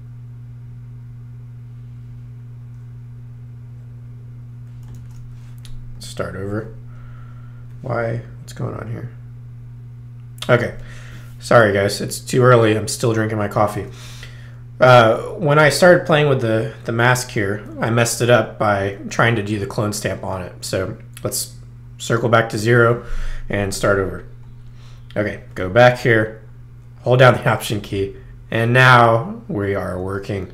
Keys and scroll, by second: 4.9 super+z, 5.9 alt+super+z, 13.6 super+z, 19.1 alt+super+z.